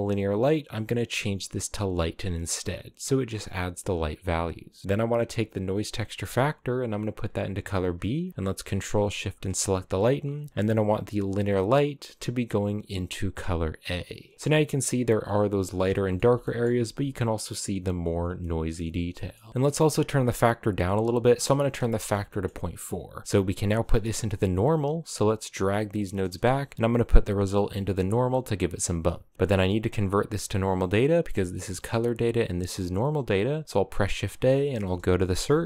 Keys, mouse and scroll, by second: 6.1 click, 9.0 ctrl+shift+click, 9.3 click, 11.9 click, 14.3-15.5 scroll up 3, 15.6-16.0 shift+middle drag, 16.0 scroll down 3, 16.1-17.7 shift+middle drag, 17.7 scroll up 3, 18.1-18.6 shift+middle drag, 18.6 scroll down 4, 18.8 shift+middle click, 19.5-21.9 drag, 21.9 shift+middle click, 22.4-22.7 scroll up 1, 23.2-24.5 scroll up 1, 24.5 click, 25.2 click, 26.2 a, 26.7 click, 30.6 click, 33.2 shift+a.